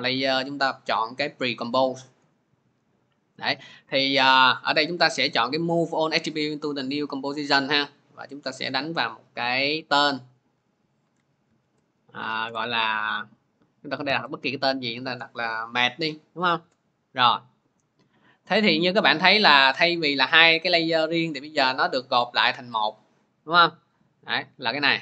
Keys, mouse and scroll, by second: 1.2 click, 2.3 click, 7.9 click, 8.5 click, 11.3-12.3 typing, 13.9-15.7 typing, 16.4 Return, 22.7 click, 23.8 click, 24.3 click, 24.8 click.